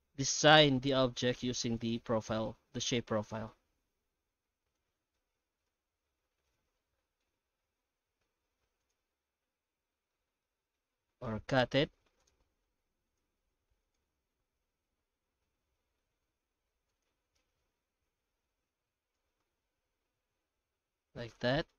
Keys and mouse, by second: 0.1 ctrl+shift+b, 2.4 middle click, 3.2 Tab, 3.5 middle click, 4.2 alt+a, 4.4 middle click, 5.2 Tab, 5.7 ctrl+z, 5.8 ctrl+z, 6.0 ctrl+z, 6.2 ctrl+z, 6.8 middle click, 7.9 ctrl+shift+b, 9.1-10.1 middle drag, 10.5 shift+middle click, 11.2 alt+x, 18.0 middle click, 18.6 f, 19.1 x, 19.8 Tab, 20.3 alt+a, 20.6-21.7 middle drag.